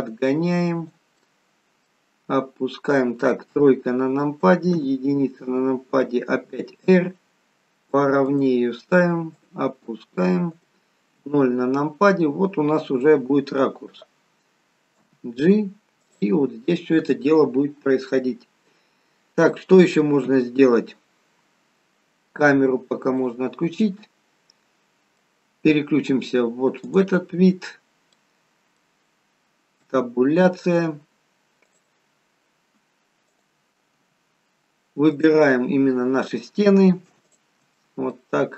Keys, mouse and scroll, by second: 1.3 middle click, 3.6 KP_3, 4.8 KP_1, 7.7 r, 9.4 click, 11.2 KP_0, 20.3 KP_0, 21.7-23.1 scroll up 3, 23.1 scroll up 2, 23.3 click, 23.8 middle click, 26.9 click, 27.5-28.2 scroll up 3, 28.2 middle click, 28.2-29.7 scroll up 3, 29.8 Tab, 31.7 click, 33.5 click, 34.0 Tab, 34.4-35.1 scroll down 3, 35.1 click, 37.3 shift+click, 37.8 middle click, 38.3 middle click.